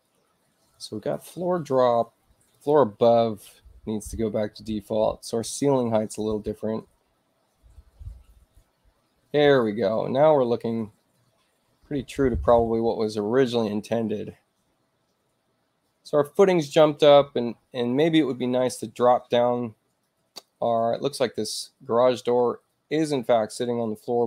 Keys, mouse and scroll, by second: 2.4 click, 5.8 click, 9.4 click.